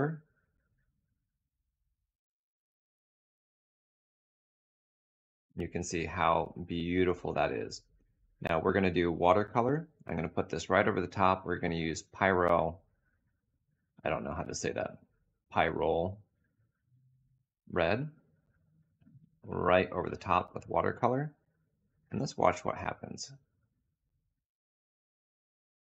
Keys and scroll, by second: 0.0 4.